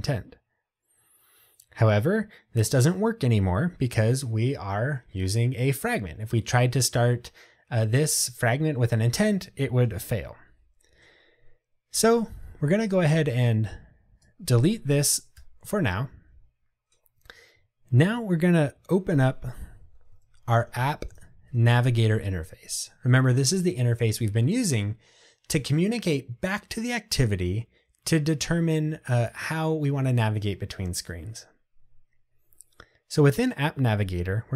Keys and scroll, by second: 15.4 Delete, 20.3 super+o.